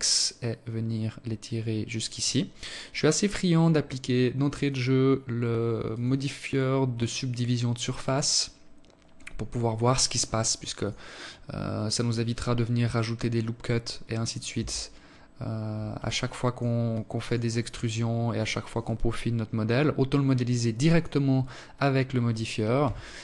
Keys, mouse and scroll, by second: 3.4 click, 4.7 click, 8.9 click, 9.6 click, 13.4 Tab, 14.8 alt+click, 15.7 alt+click, 19.7 click, 21.6 t, 23.0 click.